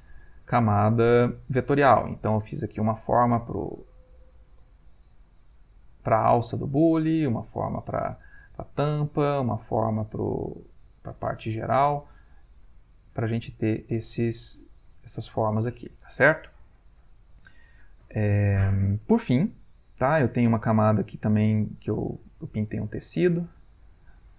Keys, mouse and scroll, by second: 0.5 ctrl+middle click, 0.5-0.9 ctrl+scroll, 2.7-3.8 drag, 3.9-5.9 drag, 6.4 middle click, 7.6 click, 9.0 click, 10.0 click, 10.9 middle click, 11.5 middle click, 12.6 click, 13.9-16.0 drag, 18.6 middle click, 19.2-20.3 ctrl+middle drag, 21.3 click, 22.5 click, 23.1 click, 23.9 middle click.